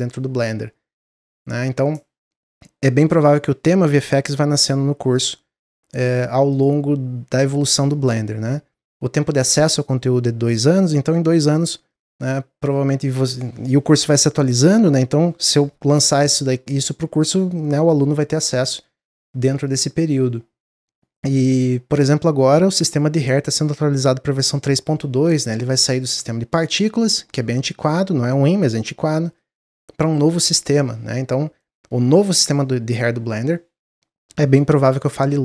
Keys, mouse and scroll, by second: 29.2 click.